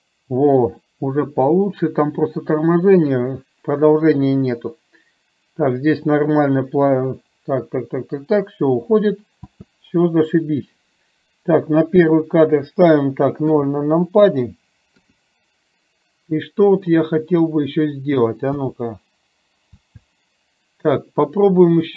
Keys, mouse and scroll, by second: 9.5 space, 11.9 click, 13.5 KP_0, 15.0 KP_0, 18.6 space, 19.9 space.